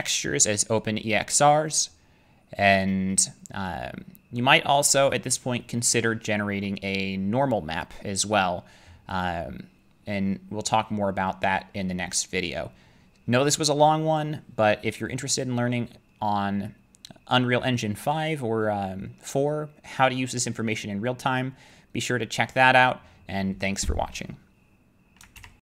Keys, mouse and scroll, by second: 2.6 middle click, 3.2 middle click, 5.3 middle click, 7.4 middle click, 9.2 click, 25.2 click, 25.4 alt+F9.